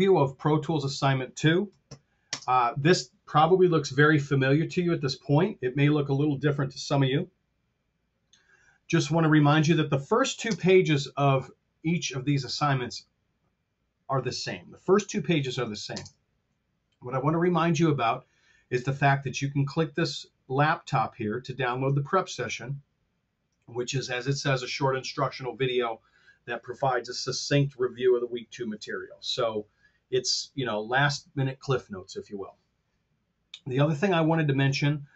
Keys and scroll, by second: 2.1 shift+space, 10.4 space, 15.9 shift+space.